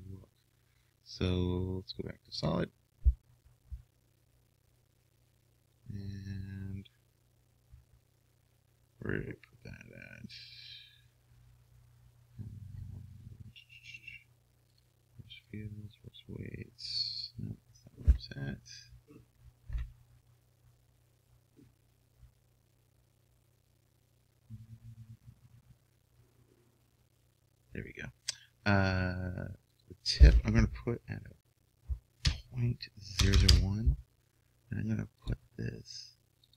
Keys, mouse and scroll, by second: 0.0-1.8 drag, 13.9-19.1 drag, 29.8-31.6 drag, 33.4 KP_0, 35.5 KP_0.